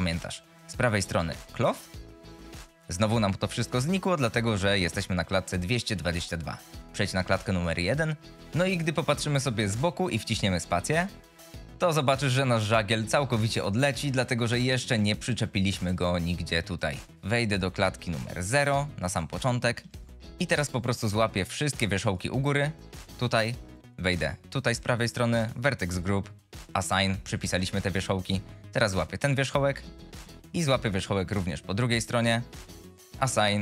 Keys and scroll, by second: 11.1 space, 20.2 ctrl+z.